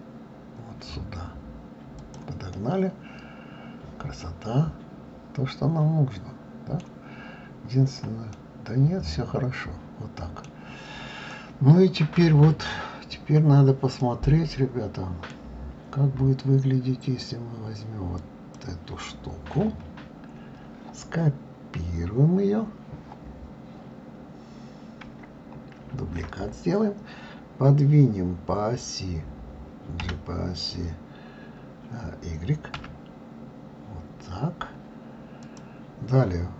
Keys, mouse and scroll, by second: 2.5-5.5 middle drag, 7.1-8.3 scroll up 5, 8.3-10.6 middle drag, 10.6-11.3 scroll down 3, 11.3-13.2 middle drag, 13.2-14.0 scroll down 4, 14.0-15.6 middle drag, 15.6-17.1 scroll down 2, 18.2 click, 26.0 shift+d.